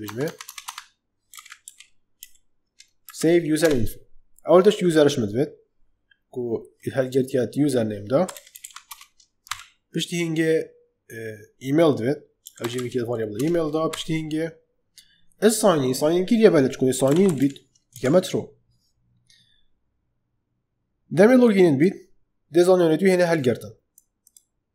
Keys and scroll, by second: 0.0 Tab, 1.2 s, 1.6 v, 2.1 e, 3.0 Down, 3.5 Return, 7.9-9.4 typing, 12.1-13.8 typing, 13.3 Return, 16.7-17.8 typing, 17.8 Escape.